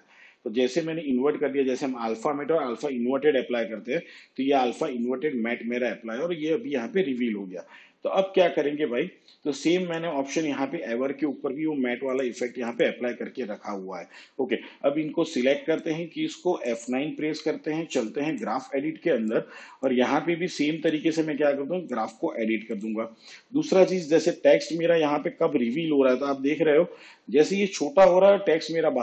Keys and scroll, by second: 17.3 F9.